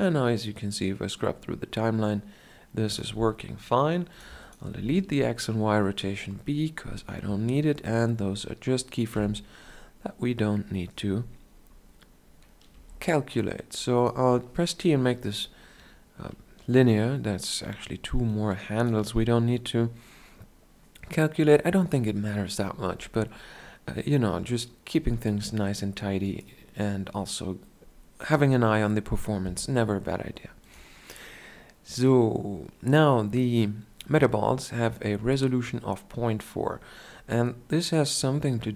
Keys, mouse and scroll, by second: 4.7-6.5 drag, 4.7 x, 7.8 middle click, 9.0 KP_Decimal, 12.6 t, 18.1-38.7 drag.